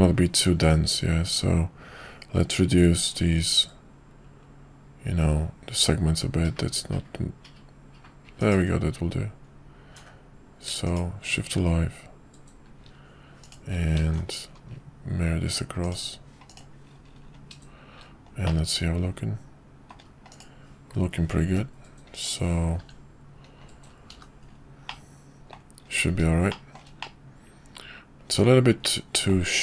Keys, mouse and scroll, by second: 13.4 shift+click, 14.0 alt+x, 16.5 click, 18.4-20.0 middle drag, 21.5 g, 23.0 f, 24.1 h, 24.9-25.5 middle drag, 26.5 shift+middle drag, 27.0-29.3 middle drag.